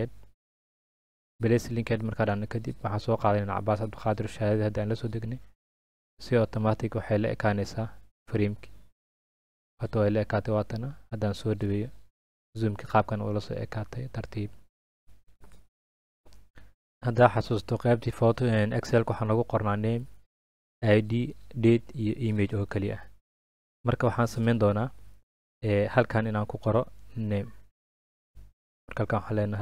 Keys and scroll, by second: 28.9-29.6 typing.